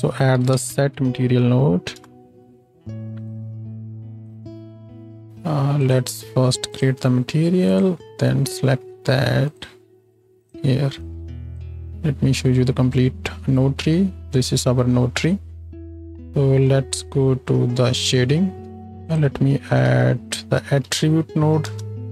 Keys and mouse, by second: 3.3 middle click, 4.0-5.9 drag, 5.3 ctrl+space, 5.9 middle click, 6.6-7.8 drag, 7.8-9.5 middle drag, 9.5-18.1 drag, 11.9 ctrl+space, 16.1 ctrl+space, 18.1-22.1 middle drag, 18.7 z, 18.8 shift+a, 20.4 t.